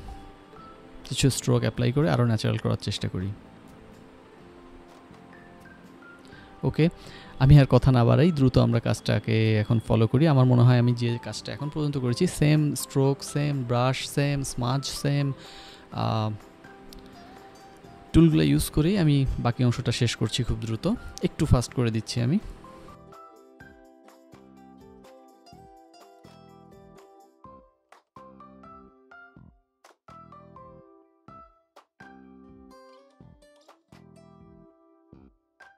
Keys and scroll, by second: 12.3-13.4 typing, 14.9 [, 15.1 [, 15.2 [, 15.4 [, 16.6-18.0 typing, 17.4 Return, 19.6 ctrl+alt+f, 20.7 ctrl+z, 23.1-24.1 typing, 24.3 ctrl+z, 25.9-26.9 typing, 29.1 ctrl+[, 29.8-31.9 typing, 34.2-35.3 typing, 35.3 ctrl+f, 35.7 Escape.